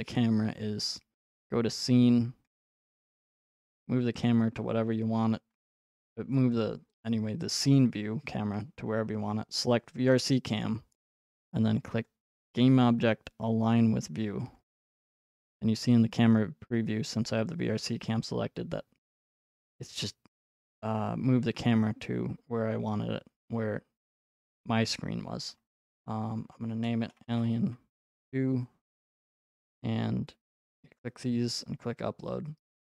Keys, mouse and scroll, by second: 1.5 click, 3.1 right click, 4.2-4.5 scroll, 10.1 click, 12.3 click, 14.7 click, 20.5 click, 20.8 click, 24.2 click, 26.8-28.5 typing, 29.5 click, 30.7 click, 32.8 click.